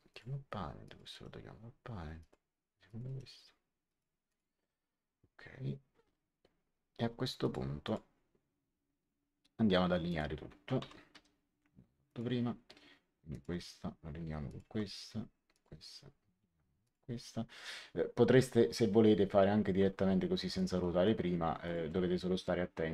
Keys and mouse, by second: 1.0 right click, 2.1 click, 3.0 right click, 3.8 click, 7.3 click, 10.0 click, 10.3-11.6 typing, 12.0 click, 13.2 click, 14.4 click, 15.4 click, 16.8 click, 20.5 click, 21.6 click.